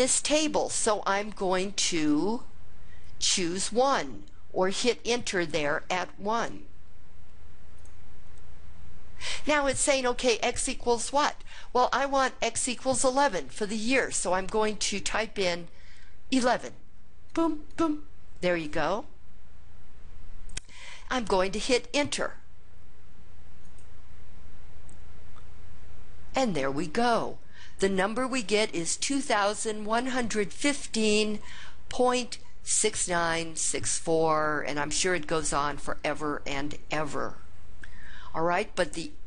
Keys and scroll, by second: 7.9 Return, 17.4 1, 17.8 1, 23.8 Return.